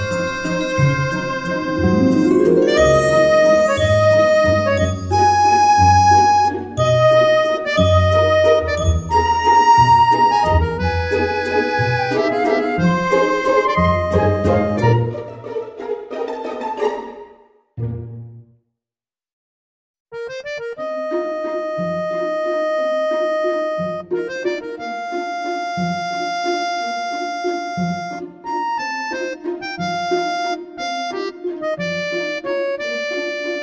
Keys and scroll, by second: 3.1 Return, 3.1 5, 10.3 Delete, 12.2 Delete, 12.5 Delete, 15.5 Delete, 15.9 Delete, 16.8 Delete, 23.3 Tab.